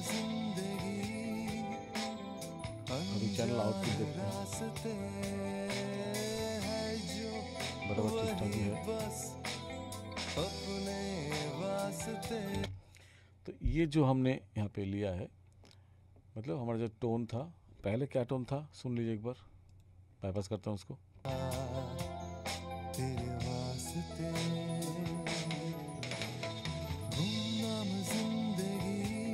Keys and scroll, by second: 12.6 space, 21.2 space.